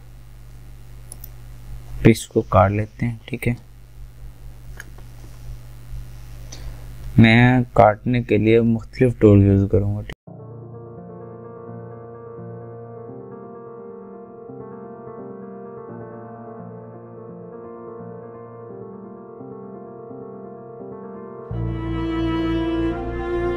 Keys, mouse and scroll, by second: 10.9 click, 11.6 click, 11.7 alt+right click, 12.1 click, 12.3 click, 12.4 alt+scroll up 2, 12.7 click, 12.7 alt+scroll down 1, 12.8 ctrl+d, 12.9 ctrl+alt+z, 13.2 alt+right click, 14.1 scroll down 1, 14.2 alt+click, 14.4 alt+scroll up 1, 14.5 click, 14.8 alt+click, 14.9 alt+scroll down 2, 15.1 alt+right click, 15.2 click, 15.5 alt+scroll up 1, 15.6 alt+right click, 15.7 click, 16.4 alt+right click, 16.6 alt+click, 17.4 alt+scroll down 1, 17.5 alt+scroll up 1, 17.7 click, 18.0 click, 18.3 alt+click, 18.6 alt+scroll down 1, 18.8 alt+scroll up 1, 19.0 alt+scroll down 1, 19.5 click, 19.7 alt+right click, 19.8 alt+scroll up 1, 19.9-20.5 alt+scroll down 2, 21.0 click, 21.6 click, 22.0 scroll down 1, 22.4 click, 22.7 click, 22.8 alt+scroll down 1, 23.2 click.